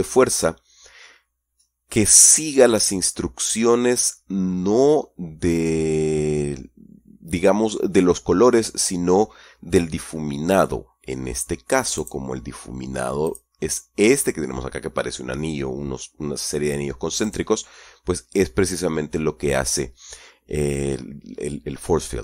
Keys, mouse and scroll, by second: 2.3 right click, 12.4 right click, 13.7 click, 17.6 right click.